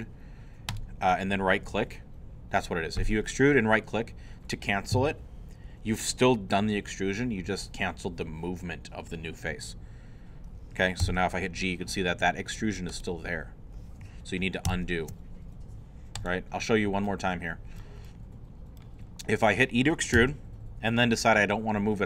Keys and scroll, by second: 11.0 g, 14.7 ctrl+z, 20.2 e.